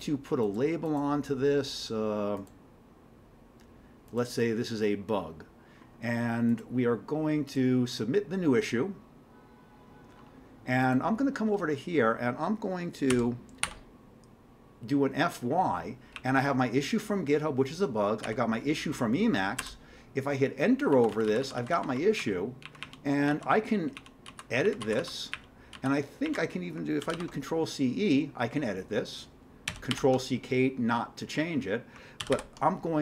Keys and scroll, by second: 13.1 f, 20.9 Down, 21.1 Down, 21.3 Down, 21.4 Down, 21.6 Down, 21.7 Down, 22.1 Down, 22.6 Up, 22.8 Up, 23.3 Down, 24.0 Up, 24.3 Down, 24.6 Up, 24.8 Down, 25.0 Down, 25.3 Up, 25.7 Down, 26.3 Up, 27.0 ctrl+c, 27.1 ctrl+e, 29.7 ctrl+c, 29.9 ctrl+k, 32.2 ctrl+c, 32.3 ctrl+n.